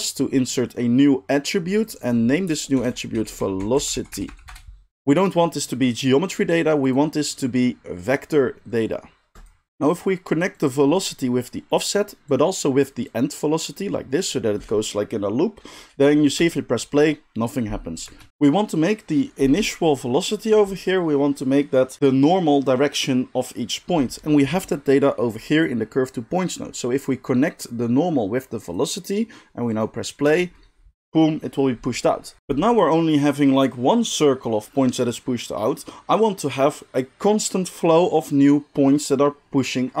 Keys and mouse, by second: 1.9 middle click, 2.0-40.0 drag, 16.4 space, 18.0 space, 30.2 space.